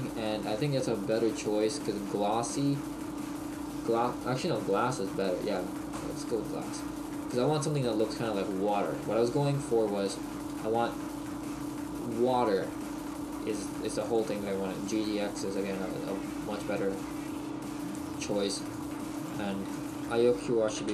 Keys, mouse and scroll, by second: 6.5 click, 6.7 click, 8.7 click, 19.0 click.